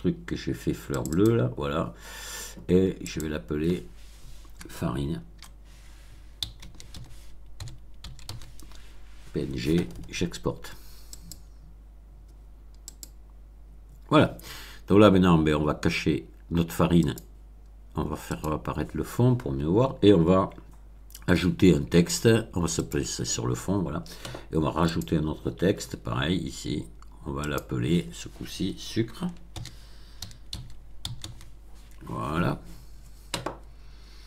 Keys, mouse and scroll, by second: 0.8 click, 3.0 click, 4.5 BackSpace, 6.3 f, 6.5 a, 6.8 r, 8.0 n, 8.2 e, 11.1 click, 12.8 click, 16.9 click, 18.3 click, 22.8 click, 24.8 click, 27.3 click, 29.5 shift+s, 30.5 c, 31.0 r, 31.2 e.